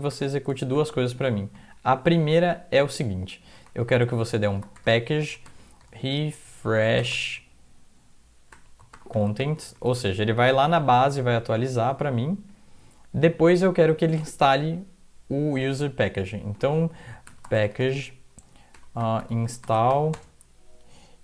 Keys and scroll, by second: 0.0-0.9 typing, 1.4 Up, 1.5 Left, 1.9 Right, 2.1 Down, 3.4 Up, 3.6 Left, 3.6-7.1 typing, 8.5-9.9 typing, 10.6 Right, 11.1 Down, 11.6 Left, 11.9 Left, 17.0-20.4 typing.